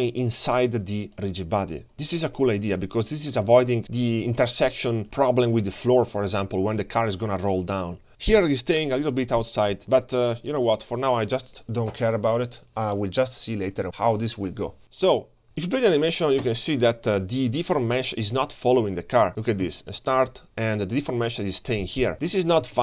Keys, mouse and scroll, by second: 0.2 click, 0.9 click, 1.8 click, 2.4-3.7 scroll down 6, 3.7-4.0 scroll up 2, 4.2-4.6 scroll down 1, 5.1-5.4 scroll down 3, 5.4 shift+middle click, 8.2 scroll up 2, 9.6-10.0 scroll down 6, 10.2 shift+middle drag, 12.4-13.2 scroll up 1, 13.2-13.8 scroll up 2, 13.8 click, 13.9 scroll down 1, 14.4-14.8 scroll up 2, 14.8 middle click, 14.8-15.4 scroll down 5, 15.4 click, 15.4 space, 16.4 space, 18.2 space, 18.9 click, 19.4-22.7 drag.